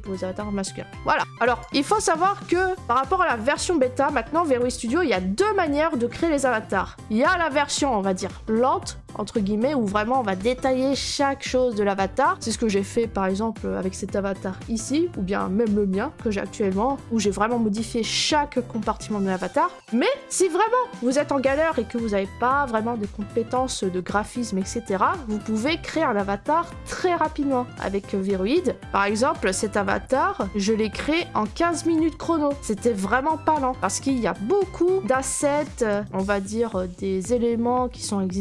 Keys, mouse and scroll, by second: 1.6 click, 28.8-29.4 scroll, 30.4-31.4 scroll, 31.9 click, 32.5-33.8 scroll, 33.8-34.1 scroll, 34.1 click, 34.9 click, 35.4 middle click, 36.0 right click, 36.6 middle click, 37.3 right click.